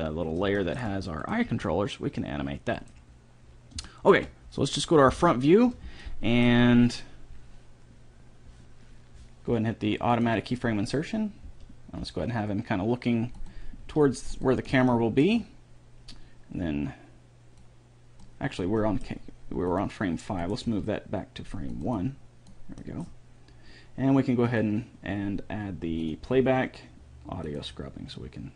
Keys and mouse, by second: 1.7 g, 2.1-3.4 drag, 3.7-5.2 middle drag, 10.4-12.1 drag, 11.7 g, 14.0 r, 17.9-19.4 drag, 19.1 middle click, 19.9-23.9 drag, 19.9 middle click, 20.9 g, 25.1-27.9 drag, 28.3-28.5 middle drag.